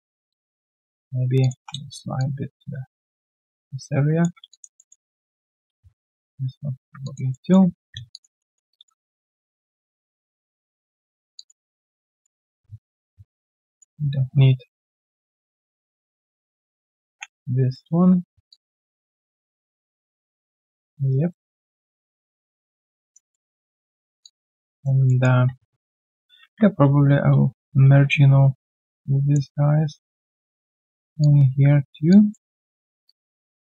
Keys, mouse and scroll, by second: 0.2 alt+click, 0.6 q, 0.8 right click, 1.5 w, 2.1 ctrl+shift+click, 4.5 alt+click, 6.0 ctrl+shift+click, 7.0 alt+click, 8.1 alt+click, 8.3 alt+middle click, 8.7 alt+click, 9.0 alt+middle click, 9.3 alt+right click, 9.5 alt+click, 11.3 alt+click, 11.7 alt+middle click, 12.0 alt+click, 13.1 right click, 13.8 double click, 17.0 ctrl+Delete, 18.4 alt+click, 19.3 alt+middle click, 19.6 alt+click, 19.9 alt+middle click, 20.2 alt+click, 21.1 right click, 21.9 right click, 23.3 alt+middle click, 24.2 alt+click, 25.0 alt+middle click, 25.5 q, 26.4 ctrl+shift+x, 27.5 ctrl+shift+x, 27.9 ctrl+shift+q, 32.0 alt+click.